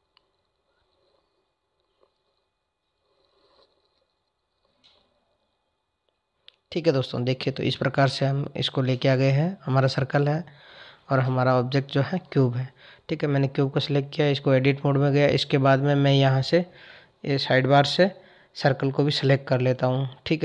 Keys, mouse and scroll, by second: 4.8 click, 7.1 click, 7.9 click, 9.5 click, 12.3 Tab, 17.9 shift+click.